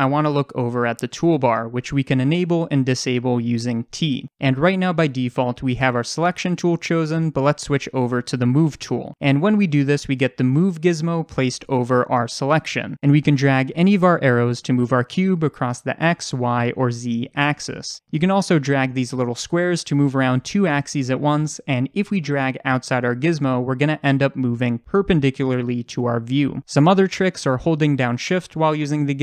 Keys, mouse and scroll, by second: 3.1 t, 8.5 click, 13.5-22.7 drag, 24.5 ctrl+z, 27.3-29.2 drag.